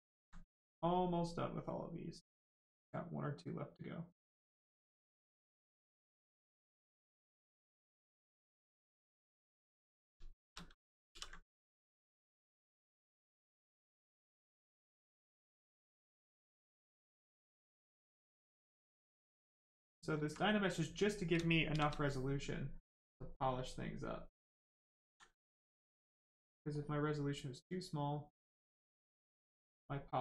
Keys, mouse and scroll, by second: 0.4 right click, 6.3 click, 7.0 right click, 8.0 shift+right click, 8.7 click, 10.4 shift+f, 11.0 ctrl+w, 11.7 click, 14.0 click, 16.6 click, 18.8 click, 20.2 alt+right click, 21.3 shift+right click, 21.6 shift+f, 23.0 click, 25.0 ctrl+z, 26.0 click, 26.7 click, 29.9 right click.